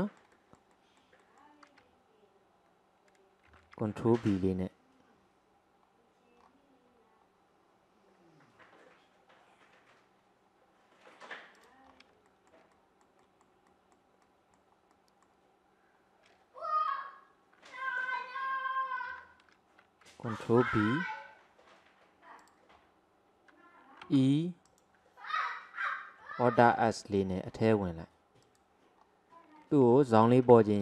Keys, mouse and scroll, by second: 3.5 ctrl+b, 11.9-12.3 scroll up 2, 12.3-18.0 shift+middle drag, 19.2 ctrl+z, 20.7 ctrl+b, 22.8-24.2 scroll up 1, 24.2 e, 26.7 alt+s, 29.1-30.3 scroll up 2, 30.4 ctrl+r.